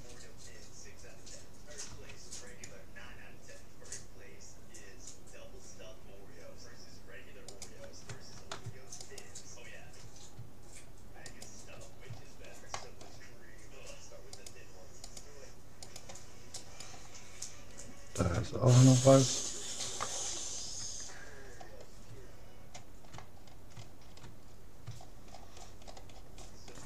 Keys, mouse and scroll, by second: 1.9 c, 9.1-10.7 right drag, 11.3-12.9 right drag, 12.0-14.1 middle drag, 14.3-18.3 right drag, 18.8 middle click, 19.8-20.1 scroll up 1, 20.1-25.5 middle drag.